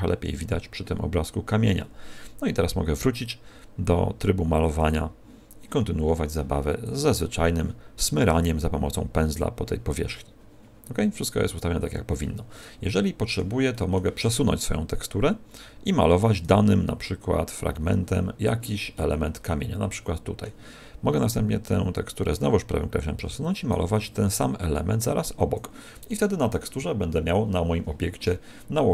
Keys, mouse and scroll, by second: 4.8 click, 6.0-6.4 scroll down 5, 7.0 click, 8.8 scroll down 2, 9.5 click, 12.8 middle click, 13.6 middle click, 14.5 right click, 17.2 click, 18.9 middle click, 22.2 right click, 24.2 click, 26.0 middle click.